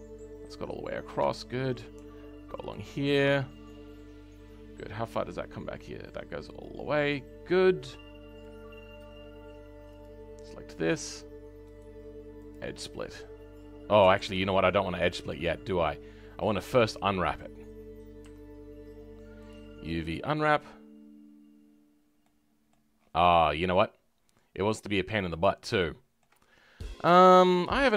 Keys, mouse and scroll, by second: 0.6-1.3 scroll up 5, 1.3-2.7 shift+middle drag, 2.7 alt+shift+click, 3.2-3.6 scroll down 3, 3.6-8.4 middle drag, 12.5 right click, 14.1 ctrl+z, 16.7 click, 17.1-17.7 scroll down 5, 17.8-18.2 scroll down 5, 18.2 a, 22.2 middle click, 22.9 scroll up 2, 23.4-25.3 middle drag, 25.3-25.7 scroll up 3, 25.7 shift+middle click, 26.4-27.1 scroll up 10, 27.1-27.9 shift+middle drag.